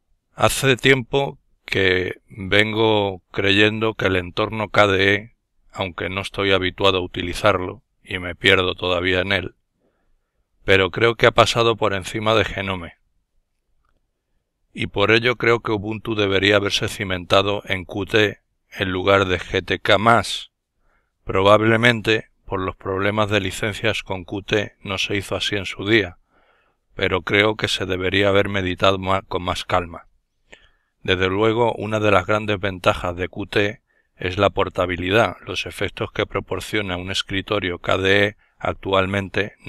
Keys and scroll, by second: 9.4 super+!, 20.2 super+F4, 24.1 alt+F4.